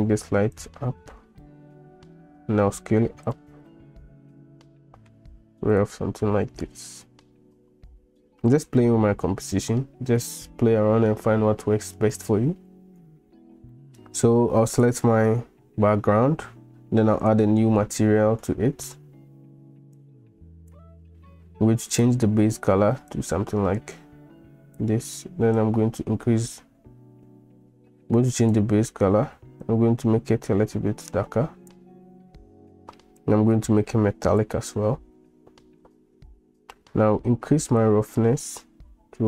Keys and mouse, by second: 0.6 click, 2.5 s, 3.7-5.1 middle drag, 5.8 drag, 6.8-8.7 drag, 13.7 middle drag, 13.9 click, 17.3 click, 18.6 shift+click, 20.1 click, 21.9 click, 33.6 click, 38.0-39.2 drag.